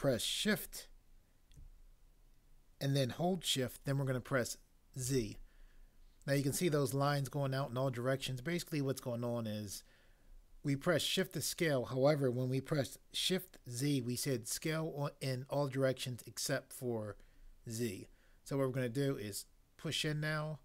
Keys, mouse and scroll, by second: 5.1 z.